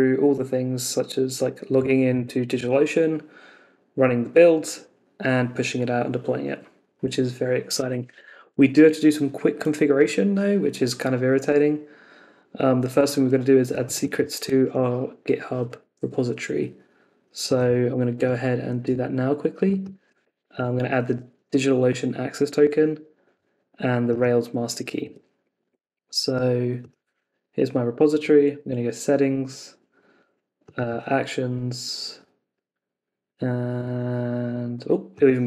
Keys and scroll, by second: 14.6 super+c, 20.4 super+c, 25.0 super+Tab.